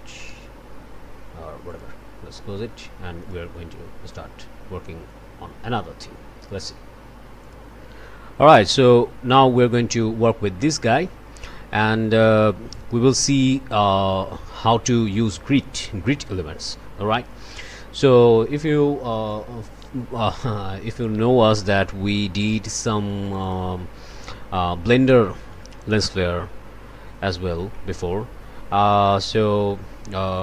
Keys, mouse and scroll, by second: 3.2 click, 7.4-8.4 drag, 8.4 right click, 10.0 scroll down 1, 10.4 scroll up 1, 10.8 right click, 12.7-16.5 drag, 17.3 click, 19.3-21.7 drag, 21.9 scroll up 1, 23.2 click, 24.2 scroll down 2, 26.6-27.0 scroll up 2, 30.3 click.